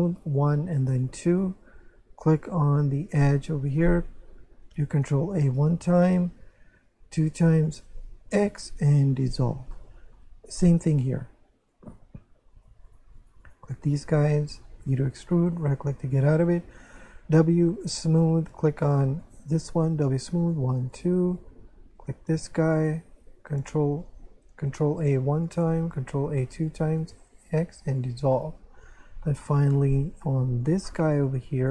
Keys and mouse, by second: 0.2 click, 0.7 w, 0.9 click, 2.7 click, 5.2 ctrl+a, 5.9 right click, 6.3 ctrl+a, 7.3 right click, 8.5 x, 9.1 click, 9.7 shift+middle click, 11.6 click, 12.5 right click, 12.9 shift+right click, 14.8 e, 15.5 right click, 16.6 w, 17.8 click, 19.2 alt+right click, 20.0 w, 20.4 click, 20.6 w, 20.8 click, 22.0 click, 22.7 right click, 25.0 ctrl+a, 25.4 right click, 25.8 ctrl+a, 26.6 right click, 27.5 x, 27.9 click, 28.3 shift+middle click, 29.9 click, 30.6 right click, 30.9 shift+right click.